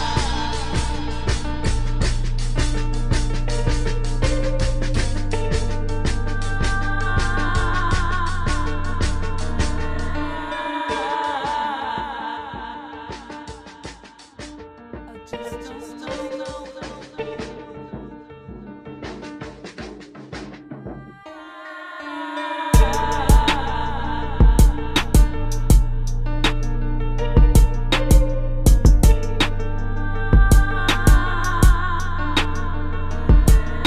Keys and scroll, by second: 4.9 space, 5.8 space, 7.0 space, 7.5 space, 7.9 space, 8.6 space, 11.9 space, 13.1 space, 13.5 space, 19.8 space, 28.5 space, 29.6 space, 29.9 space.